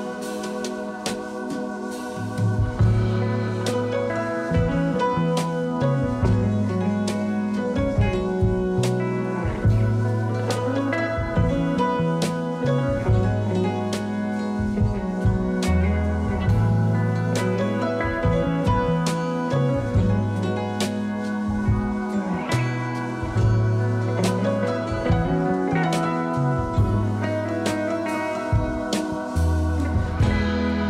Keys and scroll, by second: 4.9 ctrl+z, 5.2 x, 11.5 3, 17.4 alt+q, 18.1 alt+q, 26.8 4, 30.0 ctrl+z.